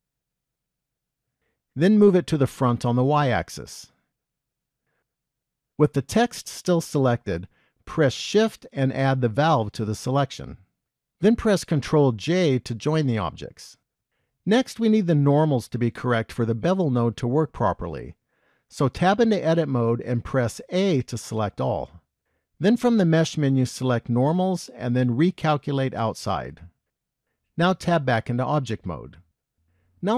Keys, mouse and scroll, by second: 0.0 middle click, 2.4 g, 6.1 middle click, 8.5 shift+click, 12.3 ctrl+j, 19.2 Tab, 20.8 a, 23.1 click, 28.2 Tab.